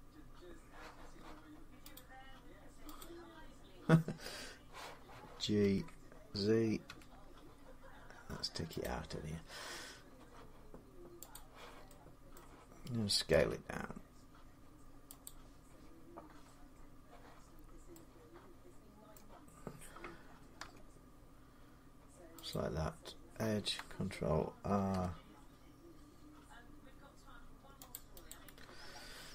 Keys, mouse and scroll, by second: 1.7 click, 2.8 click, 2.8 g, 5.4 g, 6.7 z, 7.3 click, 8.6-11.1 drag, 12.1 middle click, 13.2 s, 15.0 click, 17.3 scroll, 18.9 middle click, 20.4 Tab, 22.3 click, 24.5 ctrl+r, 26.9 scroll, 27.7 click, 27.8 scroll up 1, 28.1 click.